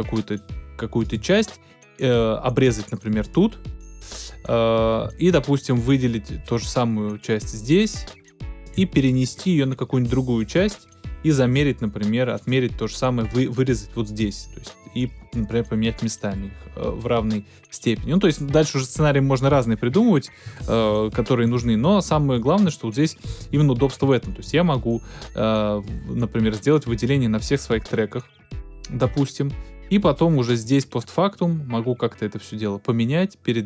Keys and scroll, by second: 20.8 super+z, 23.4 super+`, 24.0 alt+super+`.